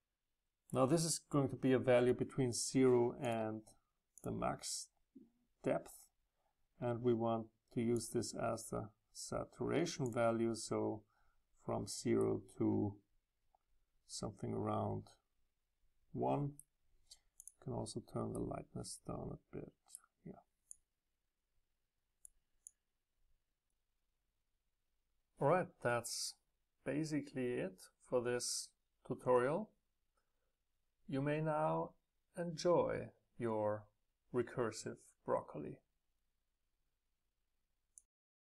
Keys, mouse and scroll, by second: 0.0-2.9 drag, 3.4-6.3 drag, 8.1-10.2 middle drag, 12.7 middle click, 12.7 scroll down 2, 12.7 right click, 13.2 right click, 17.3-18.3 drag, 18.3 right click, 18.4 middle click, 18.7 right click, 19.0-20.7 middle drag, 20.7-24.6 drag, 29.7-32.7 middle drag, 32.7-36.6 drag.